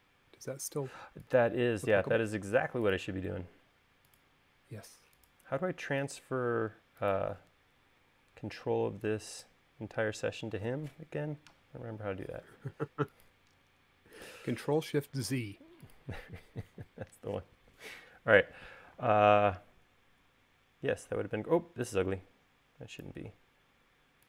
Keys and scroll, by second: 8.3 e, 12.2 l, 21.4 e.